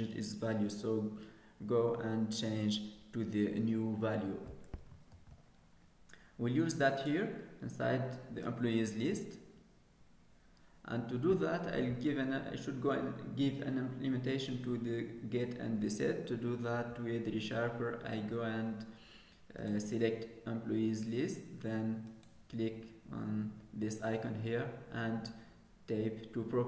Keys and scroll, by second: 5.1 ctrl+s.